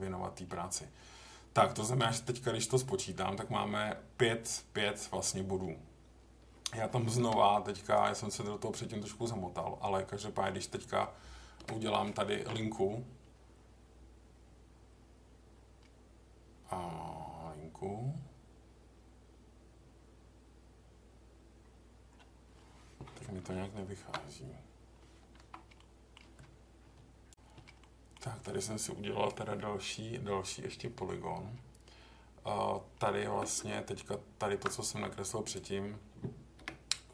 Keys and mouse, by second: 7.1 k, 23.9 ctrl+r, 25.7 middle click, 27.8 middle click, 33.4 Tab, 36.6 Delete.